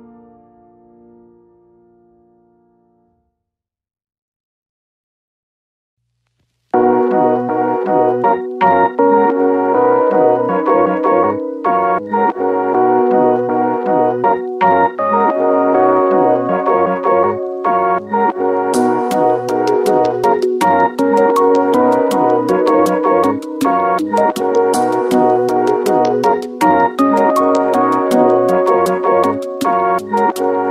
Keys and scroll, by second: 1.9 Return, 10.3 c, 13.4 shift+1, 14.1 ctrl+a.